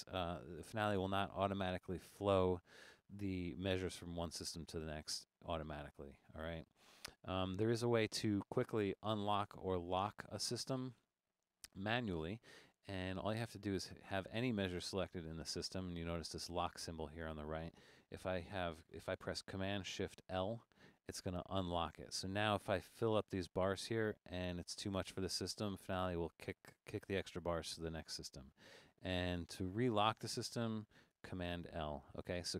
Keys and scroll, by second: 20.3 shift+super+l, 31.5 super+l.